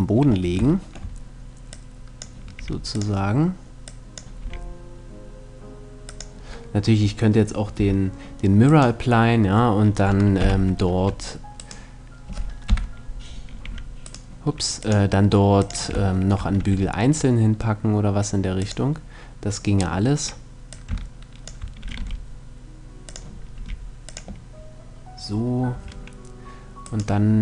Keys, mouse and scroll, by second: 1.3-5.3 drag, 2.2 r, 4.1 r, 5.8-7.5 drag, 7.4 a, 8.3 right click, 8.9 middle click, 9.4 click, 10.0 middle click, 10.0 z, 11.3 right click, 12.3 KP_3, 13.0 middle click, 13.3 r, 13.9-15.7 right drag, 14.4-16.2 drag, 16.2 r, 18.3-20.1 drag, 20.1 middle click, 20.3-22.0 drag, 21.5 r, 22.7-25.3 drag, 23.2 r, 25.4 a, 26.5-27.4 right drag.